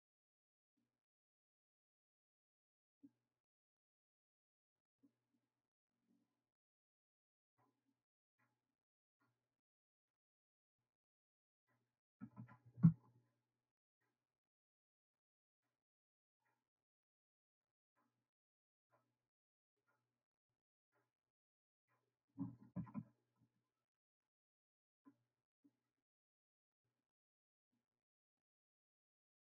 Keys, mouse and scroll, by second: 12.9 g, 27.7 click.